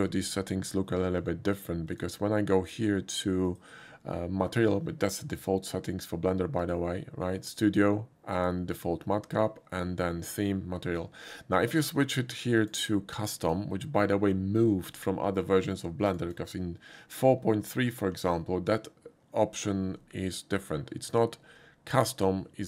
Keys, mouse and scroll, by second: 1.9 click, 3.5 click, 6.6 click, 8.3 click, 12.6 click, 13.4 click, 16.0 click, 16.2 click.